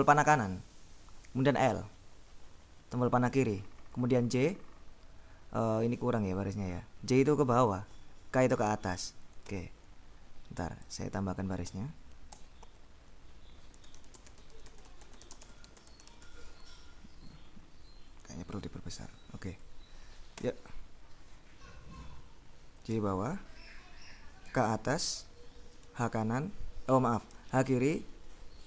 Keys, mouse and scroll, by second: 2.1 l, 6.3 j, 8.0 k, 9.5 Escape, 10.5 Down, 10.9 End, 11.8 a, 12.4 Return, 13.6-17.0 typing, 17.4-19.0 scroll up 3, 19.6-20.2 ctrl+scroll up 1, 20.5 Escape, 22.3 j, 24.5 k, 25.9 h, 27.4 h, 28.0 l.